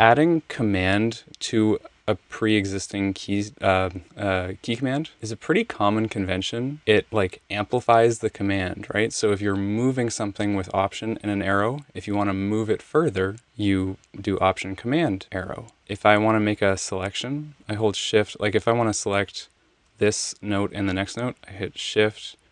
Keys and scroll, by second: 16.0 Left, 16.2 Left, 16.4 Left, 18.4 Right, 18.5 Left.